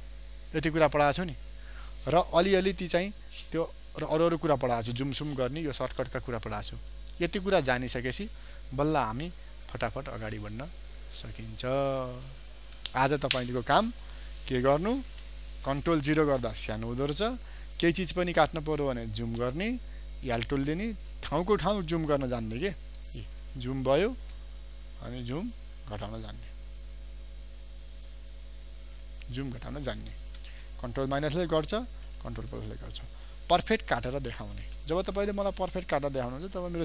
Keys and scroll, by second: 14.7 ctrl+d, 16.0 ctrl+0, 17.9 ctrl+space, 23.4 ctrl+space, 29.4 ctrl+space, 36.4 ctrl+d.